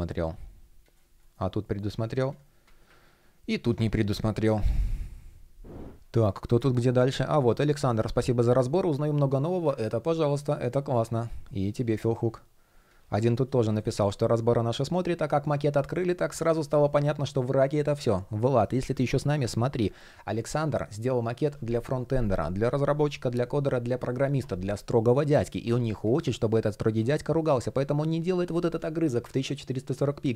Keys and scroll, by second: 0.9 shift+o, 13.2 shift+0, 18.1 shift+3, 29.9 super+r.